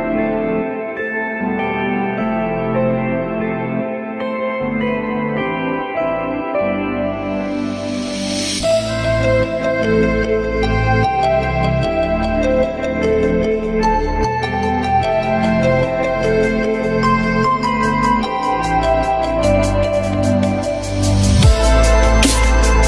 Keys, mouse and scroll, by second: 0.8 shift+click, 2.5 F3, 9.2 s.